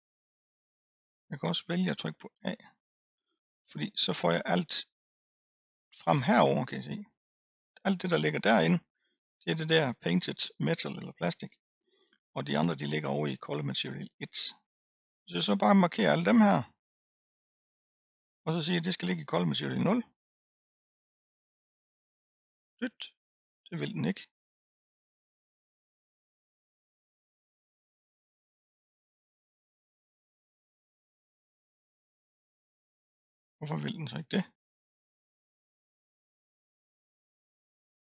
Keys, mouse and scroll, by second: 2.3 a, 16.0 click, 20.0-24.6 drag, 25.5 click, 27.4 click, 29.8 drag, 32.2-33.4 drag, 33.8-34.5 scroll down 3, 34.5-35.3 scroll up 1, 35.3 scroll down 3, 36.3 click.